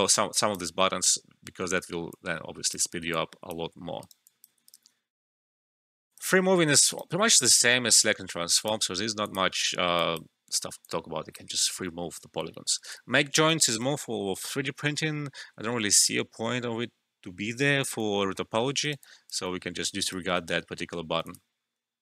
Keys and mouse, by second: 0.1 alt+middle click, 0.3 alt+click, 0.9 alt+middle click, 1.4 Return, 2.1 click, 3.1 alt+click, 3.7 alt+middle click, 4.0 alt+right click, 4.2 alt+click, 4.6 alt+right click, 6.1 click, 6.9 alt+right click, 7.1 alt+middle click, 8.5-12.2 alt+drag, 12.2 alt+middle click, 18.2 alt+middle click, 18.8 alt+right click, 18.9 alt+click, 19.5 alt+middle click, 19.8 alt+right click, 21.2 click.